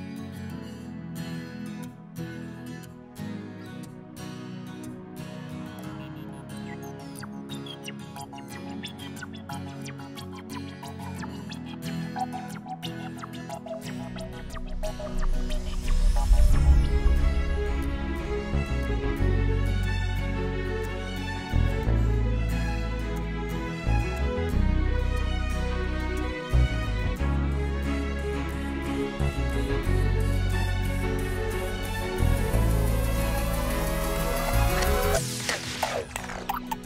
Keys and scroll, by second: 3.6 2, 3.8 Return, 5.8 Return, 8.4 ctrl+-, 10.5 ctrl+=, 11.9 ctrl+-, 12.6 ctrl+=, 22.6 ctrl+z, 34.3 u.